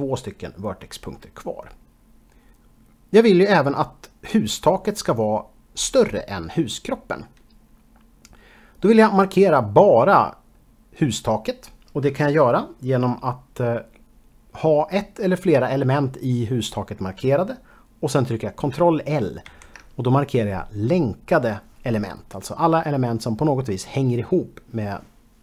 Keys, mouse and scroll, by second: 19.6 ctrl+l.